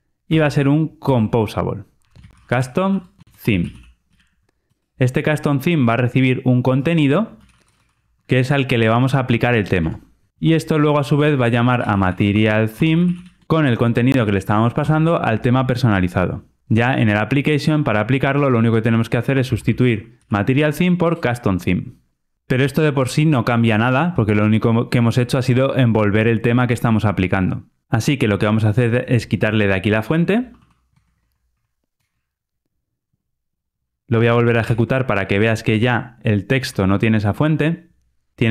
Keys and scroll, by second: 1.1 Return, 8.9 Escape, 9.7 Tab, 10.3 alt+super+l, 11.0 Tab, 13.4 super+z, 14.1 alt+Return, 21.0 Return, 22.5 ctrl+r, 31.9 super+x, 34.5 ctrl+r, 38.3 super+F8.